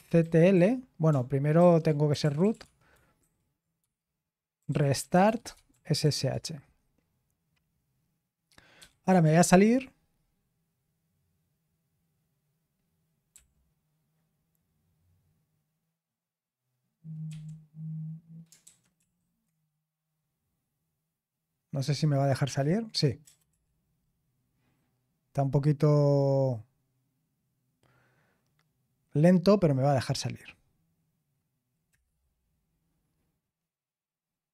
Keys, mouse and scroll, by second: 0.0-3.0 typing, 1.6 ctrl+a, 4.6 ctrl+e, 5.2-6.8 typing, 8.8-9.7 typing, 13.3 k, 17.3 i, 18.6 super+h, 19.0 super+l, 23.2 BackSpace, 23.5 BackSpace, 31.9 Return.